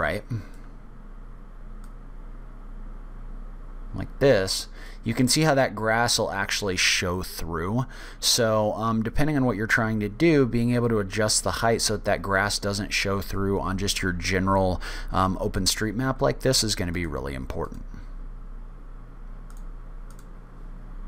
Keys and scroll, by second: 1.3 w, 10.3 w, 11.9 w, 17.8 o.